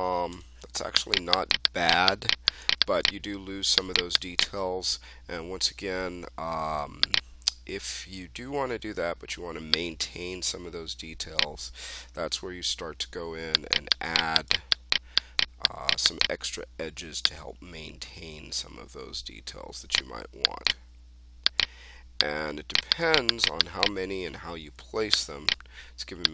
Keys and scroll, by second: 0.2 1, 24.4 3.